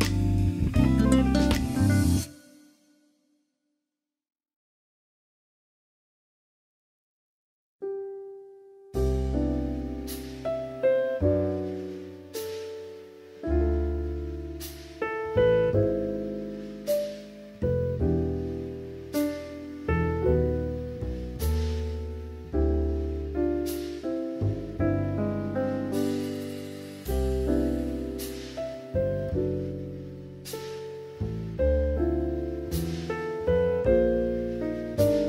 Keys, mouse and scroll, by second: 0.1 middle drag, 1.0 alt+z, 1.7 ctrl+s, 2.1 shift+middle click, 3.3 Tab, 4.1 drag, 5.4-6.3 drag, 6.4 click, 6.9 click, 7.4 shift+click, 7.9 middle click, 9.0 middle click, 9.5 shift+middle click, 10.0 middle click, 10.7 shift+middle click, 12.1 shift+d, 13.3 right click, 14.4 p, 16.3 Tab, 16.5-18.0 drag, 18.3 Tab, 18.7 middle click, 20.1 click, 21.4-21.9 drag, 22.5-23.3 drag, 23.8 shift+middle click, 24.6-27.4 drag, 27.8 middle click, 29.4 click, 30.3 middle click, 31.1 Tab, 31.6 middle click, 32.4 shift+middle click, 33.1 shift+middle click.